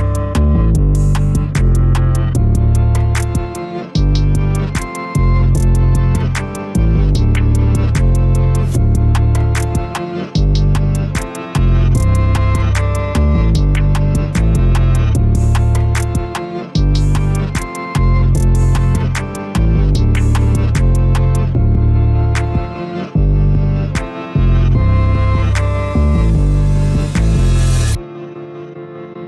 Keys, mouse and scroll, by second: 0.1 click, 0.6 KP_1, 1.3 g, 2.7 a, 3.0-3.8 middle drag, 3.8 click, 4.7 3, 5.2 click, 5.4 click, 6.9 shift+click, 7.0 shift+click, 7.9 g, 11.1 a, 11.4 Tab, 11.5 click, 12.2 KP_1, 12.9 g, 13.9 scroll up 1, 14.5 z, 16.1-16.5 scroll up 1, 16.5 shift+middle click, 16.9-17.2 scroll up 1, 17.4 g, 19.6 a, 19.7-20.4 scroll down 11, 20.4-20.7 middle drag, 20.7 z, 21.2-22.3 shift+middle drag, 22.3-22.8 scroll up 1, 22.8-23.4 middle drag, 23.4 click, 26.0 ctrl+r, 27.8 a, 27.9 a, 28.4 ctrl+r.